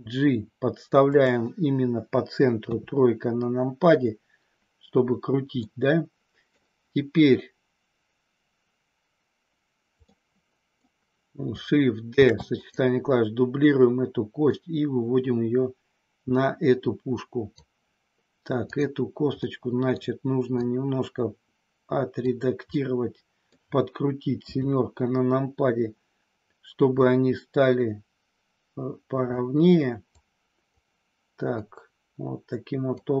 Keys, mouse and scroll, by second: 1.0 click, 2.5 KP_3, 5.5 scroll up 1, 5.7 middle click, 10.0 middle click, 12.1 shift+d, 12.5 click, 14.5-17.4 drag, 18.8 click, 19.4 middle click, 20.7-22.1 drag, 22.8 middle click, 23.5 scroll down 1, 24.4 KP_7, 26.9-29.3 drag, 30.0 click, 31.5-32.9 drag.